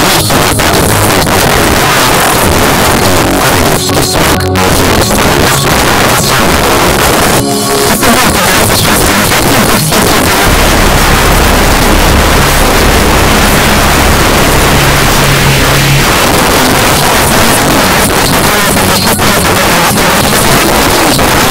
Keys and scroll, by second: 0.0 ctrl+v, 0.3-1.1 Down, 1.3 Down, 1.6 Return, 16.1 Page_Down.